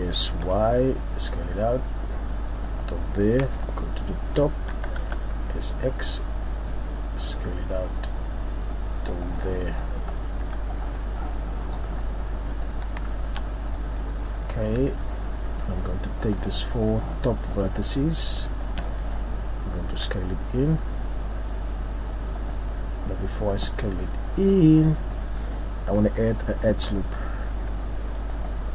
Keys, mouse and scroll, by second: 2.7 click, 3.5 KP_7, 4.7 s, 9.5 scroll down 1, 9.6 middle click, 10.1-10.8 scroll up 3, 10.4 z, 10.8 middle click, 11.4 middle click, 12.1 middle click, 12.1-12.9 scroll up 3, 13.1 shift+scroll up 3, 13.4 scroll down 3, 13.7 middle click, 14.3-14.9 scroll up 2, 14.8 Tab, 15.2 scroll down 1, 16.2 right click, 16.7 shift+right click, 19.9 s, 22.6 right click, 23.8-24.4 scroll down 3, 24.3 middle click, 24.8 scroll up 1, 24.9 middle click, 25.6 scroll up 1, 26.7 ctrl+r.